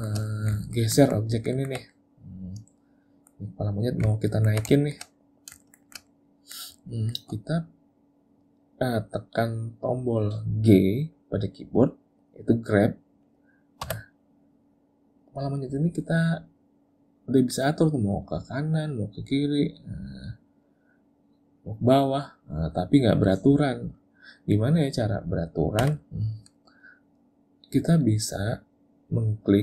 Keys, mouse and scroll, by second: 0.3 middle click, 0.7 ctrl+middle click, 1.0 ctrl+middle click, 1.4 ctrl+middle click, 1.6 middle click, 1.9 middle click, 4.2 ctrl+middle click, 4.8 shift+middle click, 5.2 middle click, 5.7 shift+middle click, 5.9 shift+middle click, 6.1 middle click, 7.0 shift+middle click, 13.9 g, 24.0 middle click.